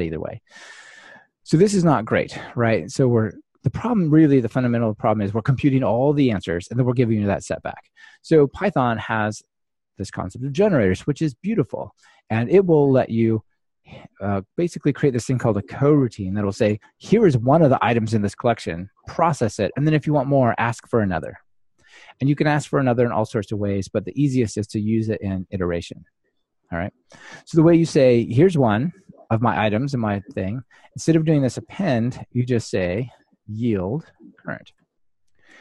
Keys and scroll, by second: 10.7 super+x, 32.4 ctrl+alt+shift+Right.